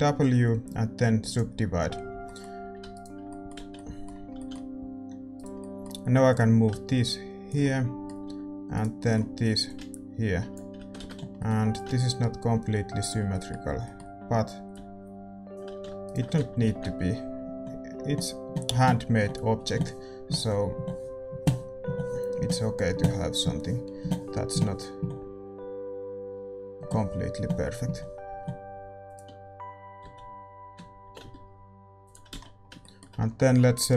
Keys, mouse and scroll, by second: 1.3 w, 2.1 a, 2.2-7.1 middle drag, 2.9-4.3 right drag, 3.5 z, 4.3 a, 6.2-8.2 drag, 7.6 middle click, 8.2 a, 9.6-16.7 drag, 9.6-11.0 right drag, 11.0 ctrl+z, 15.7 a, 16.0-18.9 right drag, 16.7 ctrl+b, 29.0 g, 30.0 z, 31.0 g, 32.3 z, 32.3-33.9 middle drag.